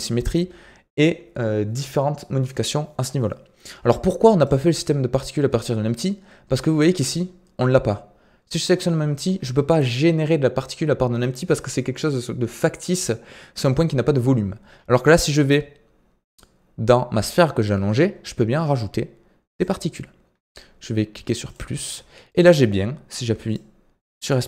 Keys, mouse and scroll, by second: 4.4-7.4 drag, 15.1-18.1 drag, 19.5-22.2 drag, 22.2-22.6 middle drag, 22.6-23.5 scroll down 2, 23.5-24.4 drag.